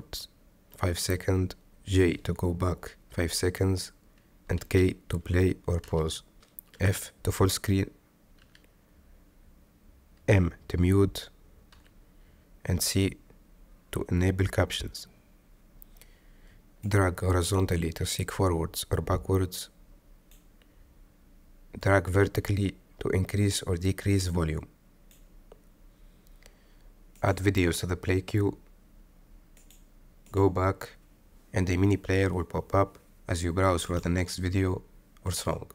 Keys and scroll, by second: 1.9 j, 5.3 k, 8.7 f, 10.6 m, 13.1 c.